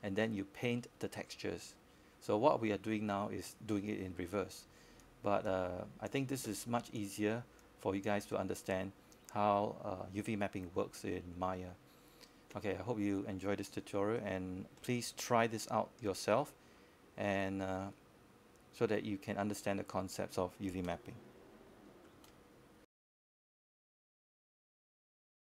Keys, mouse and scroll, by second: 6.7-7.3 scroll up 1, 7.3-9.1 scroll down 1, 9.1 click, 12.7-14.0 scroll down 1, 14.1 alt+middle click, 20.8 click.